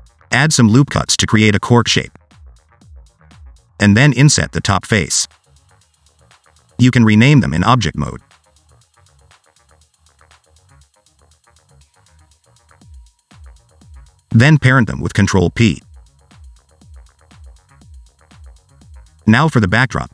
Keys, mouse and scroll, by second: 0.0 click, 0.7-1.2 scroll up 1, 1.2 s, 1.8 i, 2.9 ctrl+r, 4.4 s, 4.4 ctrl+r, 4.5 alt+z, 4.8 2, 4.9 middle click, 5.1 click, 5.3 click, 5.5 3, 5.6 click, 5.8 i, 6.4 middle click, 6.6 Tab, 7.0 right click, 7.8 scroll down 2, 8.5 F2, 10.1 click, 10.8 F2, 11.7 t, 14.4 click, 15.3 shift+click, 16.0 ctrl+p, 16.8 click, 17.3 click, 17.7 g, 20.0 shift+a.